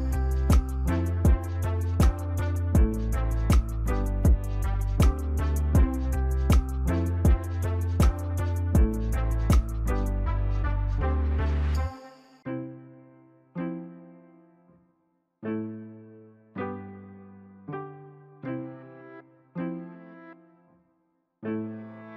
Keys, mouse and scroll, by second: 0.6 right click, 4.2 Delete, 4.9 double click, 6.9 e, 8.4 ctrl+s, 12.7 right click.